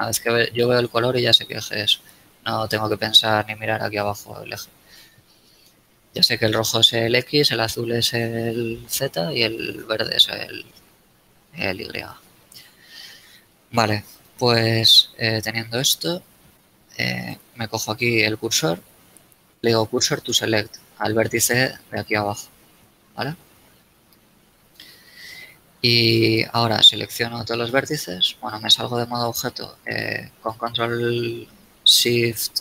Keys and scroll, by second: 24.5 KP_1, 26.8 a, 28.2 Tab.